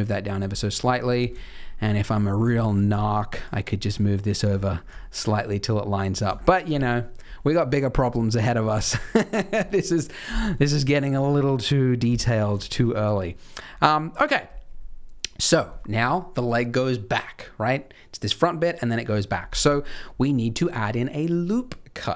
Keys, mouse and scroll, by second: 0.9-1.6 scroll down 7, 1.3 shift+middle click, 1.7 shift+middle click, 2.0-2.4 scroll up 6, 2.5 shift+middle click, 2.9 click, 3.1 click, 3.8 g, 4.7 scroll down 3, 4.9 shift+middle click, 5.6-6.6 scroll down 6, 6.3 shift+middle click, 8.4-9.0 scroll up 5, 9.0 scroll down 2, 10.4 scroll up 2, 10.6 shift+middle click, 12.6 shift+middle click, 19.8-22.1 scroll down 3.